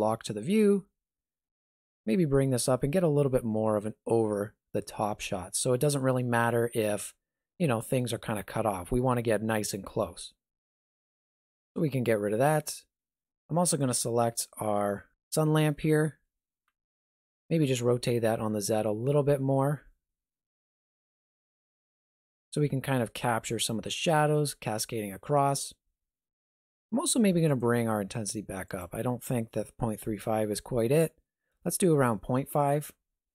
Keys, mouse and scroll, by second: 0.3 shift+middle click, 1.9 middle click, 2.7 shift+middle click, 6.6 shift+middle click, 10.5 n, 11.5 click, 11.9 n, 13.7 right click, 16.6 r, 27.4 click.